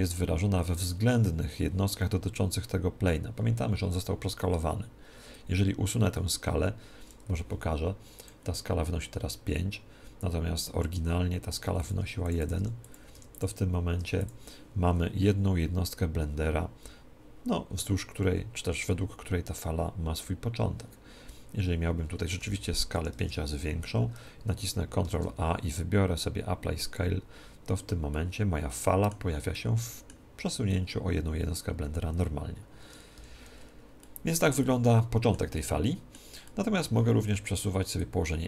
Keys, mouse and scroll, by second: 1.1 Tab, 2.2 Tab, 7.3 n, 8.1 click, 11.7-15.1 drag, 13.1 1, 14.9-22.3 middle drag, 22.3 s, 24.0-25.9 middle drag, 25.0 ctrl+a, 26.2 ctrl+a, 28.1-31.3 middle drag, 33.1-33.6 scroll up 1, 33.1 n, 33.6-37.9 middle drag, 37.9 click.